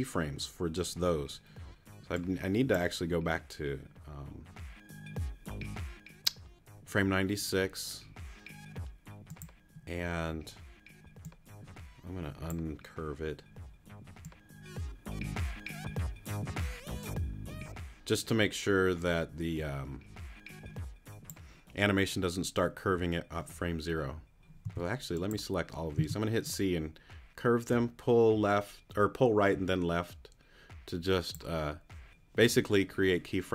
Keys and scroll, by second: 24.6 t, 25.9 c.